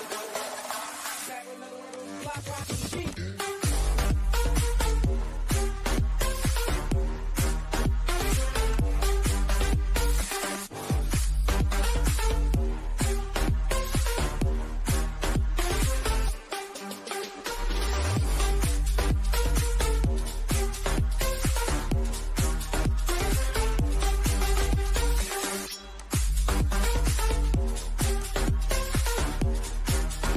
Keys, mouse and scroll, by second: 15.4 click, 15.5-17.6 shift+middle drag, 17.6 scroll up 1, 19.5-22.6 drag, 22.6 Right, 24.9 click, 25.5 scroll down 1, 27.1 click, 28.1-30.3 middle drag.